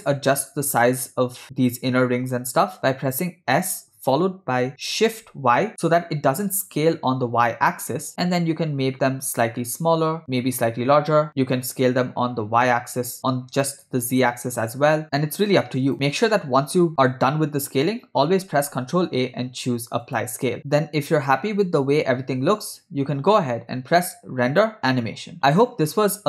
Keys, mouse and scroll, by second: 3.6 s, 12.4 s, 18.6 ctrl+a, 20.7 space, 21.0 space, 23.6 space, 24.5-25.4 drag.